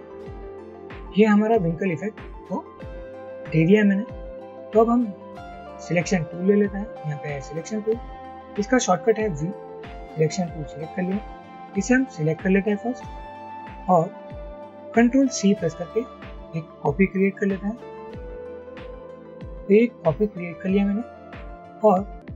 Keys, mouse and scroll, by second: 9.5 v.